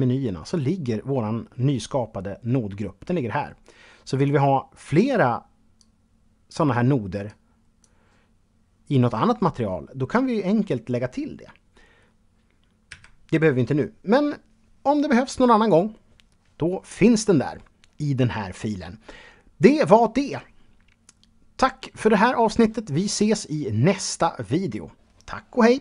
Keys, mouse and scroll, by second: 3.3 click, 4.1 click, 12.1 x.